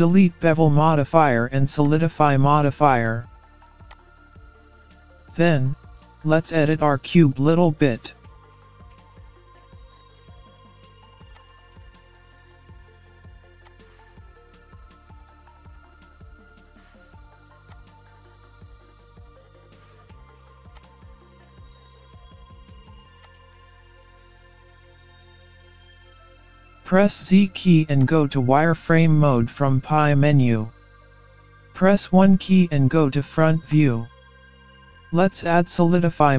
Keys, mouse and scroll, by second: 0.5-1.4 scroll down 2, 1.9 click, 3.9 click, 4.8-5.3 scroll down 3, 5.3 scroll up 2, 5.8 middle click, 7.5-7.8 scroll down 1, 8.6 scroll down 1, 8.8 scroll up 1, 9.2 middle click, 10.2-10.8 scroll down 1, 10.8 scroll down 3, 11.0 middle click, 11.4 click, 12.1 middle click, 13.6 click, 15.0 middle click, 16.0 e, 18.0 middle click, 19.2 s, 21.0 scroll up 6, 21.2 middle click, 22.6 Delete, 23.6 middle click, 25.5 scroll down 4, 25.7-26.3 scroll up 2, 25.8 middle click, 27.2 z, 28.6-28.9 scroll up 2, 28.9 middle click, 30.7 KP_1, 31.6-32.3 scroll down 3, 32.2 scroll up 2, 33.8 click.